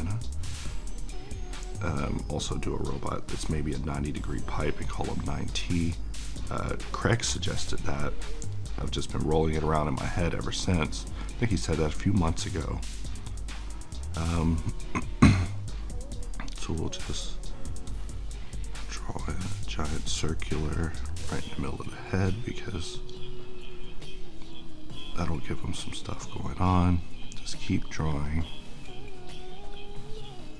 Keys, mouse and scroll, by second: 8.8 click, 10.9-30.5 drag.